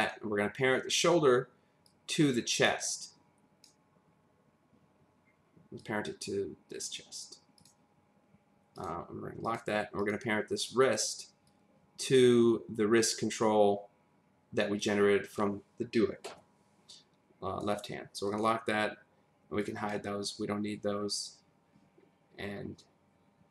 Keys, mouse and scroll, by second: 0.0 click, 1.8 click, 5.8 click, 8.8 click, 9.5 click, 10.0 click, 11.5 click, 18.3 click, 19.6 click.